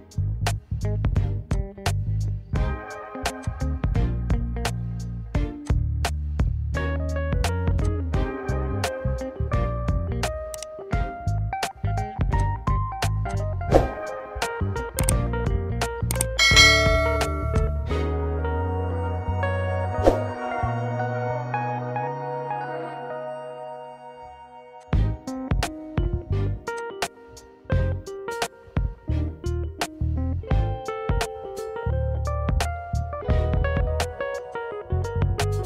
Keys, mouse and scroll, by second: 1.7 click, 3.5 click, 5.7 click, 7.9 click, 12.5 click, 13.4 click, 16.6 click, 17.6 click, 20.0 ctrl+b, 24.8 click, 26.9 click, 29.4 ctrl+-, 30.8 alt+s, 34.5 click.